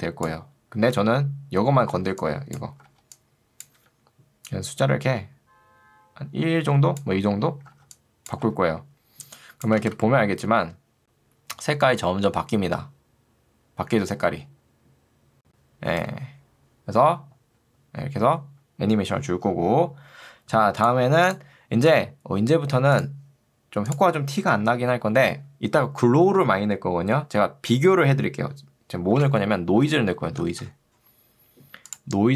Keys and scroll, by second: 0.9 Escape, 1.9 ctrl+2, 2.9 ctrl+2, 3.9 Escape, 7.7 ctrl+2, 8.5 Escape, 9.9 space, 15.9 space, 29.3 ctrl+space, 29.9 o, 30.3 i.